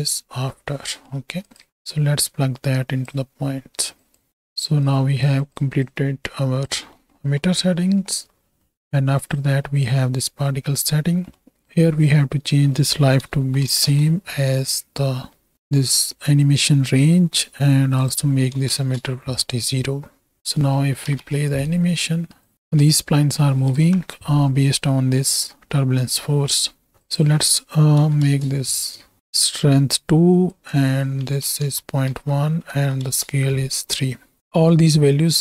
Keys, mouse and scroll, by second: 0.2 m, 0.9 click, 1.7 x, 1.9-3.0 drag, 4.0 click, 4.3-4.7 right drag, 4.8 click, 5.9 click, 6.9 middle click, 8.7 middle click, 9.2 click, 10.4 middle click, 11.3 middle click, 11.6-13.8 drag, 18.0 click, 20.9 shift+Right, 21.1 shift+Left, 21.7 space, 22.5 click, 22.7 space, 23.8 shift+Left, 24.7 middle click, 26.4 click, 27.1-28.3 drag, 30.5-33.1 drag.